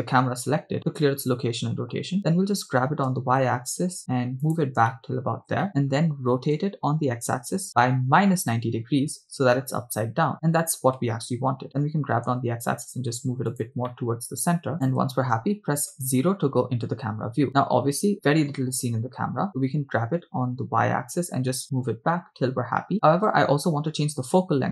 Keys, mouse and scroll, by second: 0.7 alt+r, 0.9-2.1 middle drag, 2.8 g, 3.1 y, 4.4 ctrl+click, 4.9-5.5 shift+middle drag, 5.6 middle click, 6.7-8.3 typing, 9.0 Return, 10.1-10.9 scroll down 3, 12.1 g, 12.3 x, 13.6 ctrl+click, 14.0-14.7 middle drag, 14.7 g, 14.9 ctrl+click, 15.9 KP_0, 18.1 scroll down 3, 20.5 g, 20.6 y.